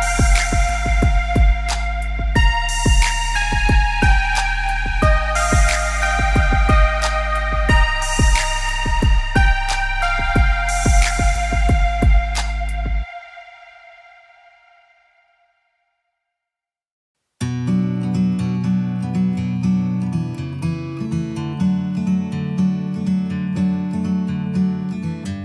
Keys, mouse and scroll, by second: 0.5 click, 2.4 click, 3.8 click, 6.0 Up, 7.6 click, 8.9 click, 10.4 click, 15.7 click, 17.3 click, 18.2 KP_1, 18.4 KP_Enter, 19.8 click, 20.9 click, 24.6 click.